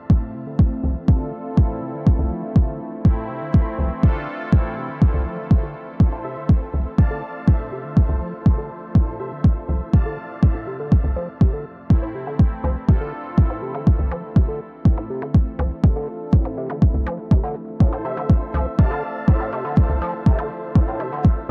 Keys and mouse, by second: 0.4 alt+click, 2.0-3.5 right drag, 3.6 alt+click, 4.1 alt+click, 4.6-5.9 alt+drag, 6.5 click, 7.6 2, 9.1 click, 10.1-11.6 drag, 12.6-15.5 drag, 15.6-17.4 alt+drag, 17.9 4, 18.4-20.7 drag, 20.4 w, 20.8 alt+click, 21.0 r, 21.4 alt+click.